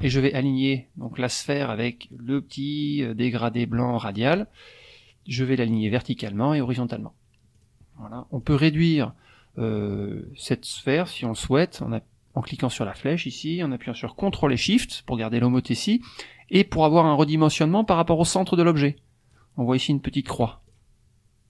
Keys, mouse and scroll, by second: 5.9 click, 6.5 click, 7.5 click, 8.4 click, 13.2-19.5 drag, 20.7 ctrl+shift+click.